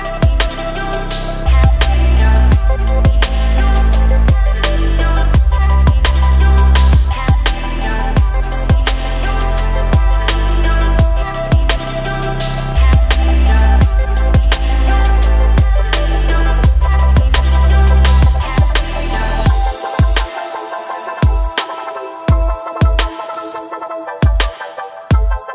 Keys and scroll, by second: 1.3 ctrl+r, 4.8 ctrl+r, 14.1 ctrl+e, 14.9 Escape, 15.6 ctrl+r, 22.0 ctrl+r.